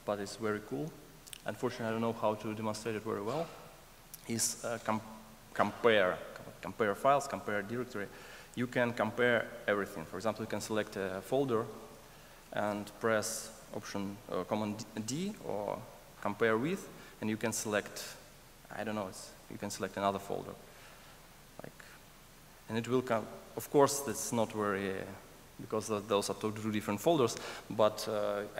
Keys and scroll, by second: 21.6 super+d.